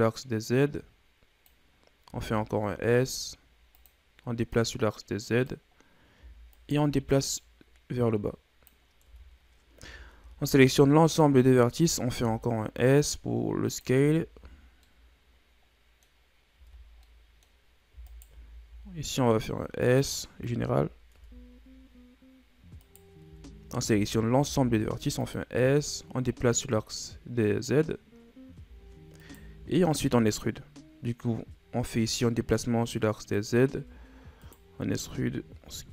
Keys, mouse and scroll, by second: 2.1 s, 4.5-5.8 drag, 5.8-6.5 scroll up 1, 6.5 alt+right click, 7.3-9.1 drag, 9.1 Tab, 9.8 Tab, 10.1 a, 10.5 a, 11.2 click, 12.1 s, 14.0 Tab, 14.4 a, 14.6 scroll down 2, 14.8-16.2 middle drag, 16.2 scroll up 4, 16.5 Tab, 17.0 middle click, 17.5-18.1 scroll up 2, 18.1 alt+right click, 18.6 s, 20.6 KP_1, 21.1 Tab, 21.8-22.3 scroll down 5, 22.3-22.8 scroll up 3, 22.8 right click, 23.3 Tab, 23.6 a, 23.9 a, 24.4 s, 26.5-29.2 drag, 29.2 alt+right click, 29.6-30.4 shift+scroll down 2, 30.4-31.7 scroll up 1, 32.5-33.8 drag, 33.8 e.